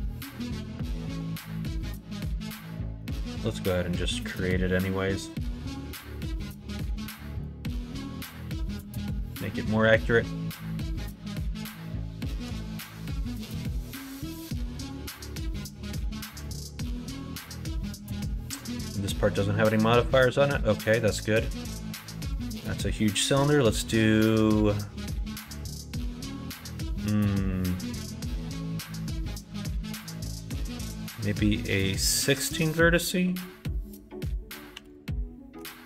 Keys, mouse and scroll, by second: 0.1 alt+shift+click, 1.5 middle click, 1.8 3, 2.2 click, 2.5 middle click, 2.8 alt+z, 3.3 middle click, 3.7-4.8 drag, 5.4 middle click, 6.1 shift+click, 6.4 shift+click, 6.7 x, 7.9 middle click, 8.7 KP_1, 8.9 KP_3, 12.6 shift+a, 14.4 right click, 16.3 shift+a, 22.3-35.8 drag.